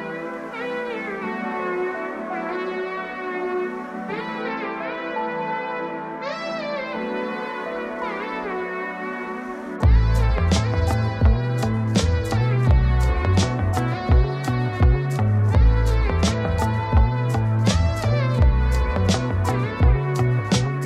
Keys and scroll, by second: 3.7 ctrl+space.